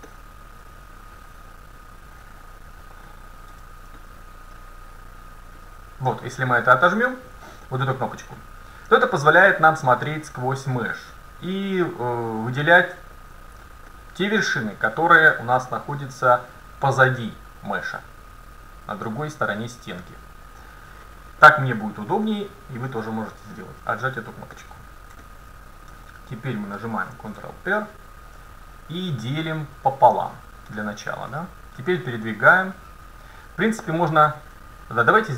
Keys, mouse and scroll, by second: 0.1-2.0 middle drag, 3.6 a, 4.0-5.8 middle drag, 5.6-7.6 drag, 6.3 middle click, 7.6 middle click, 8.2 scroll up 1, 8.3-9.1 scroll down 1, 9.1-10.8 middle drag, 12.4-14.1 right drag, 13.7-15.3 middle drag, 23.8 KP_7, 26.0 a, 27.4 ctrl+r, 35.2-35.3 drag.